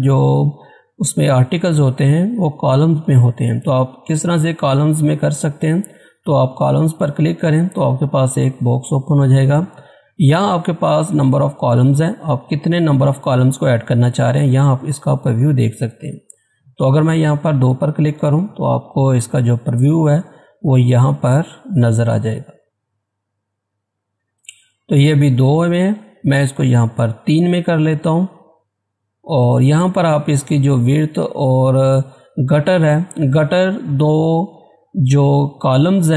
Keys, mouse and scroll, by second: 4.3 click, 9.7-12.7 drag, 16.3 click, 27.1 click.